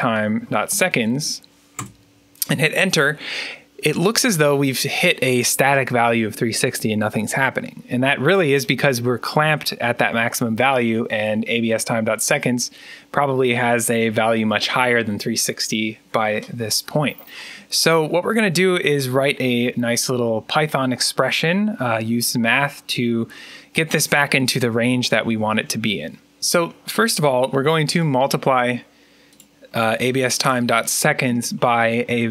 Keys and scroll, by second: 0.0-1.6 typing.